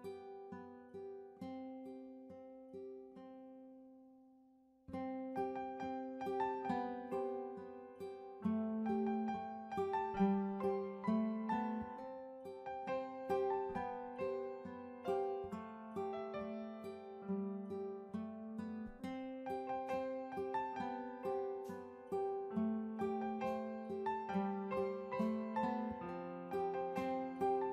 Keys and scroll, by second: 23.2 ctrl+g.